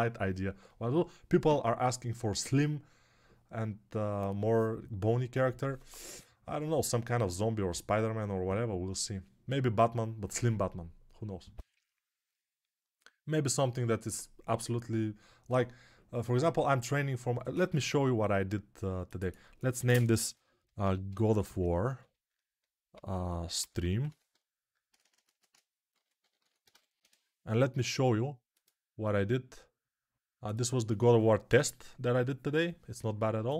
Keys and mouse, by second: 20.0-33.5 shift+drag, 24.8 BackSpace.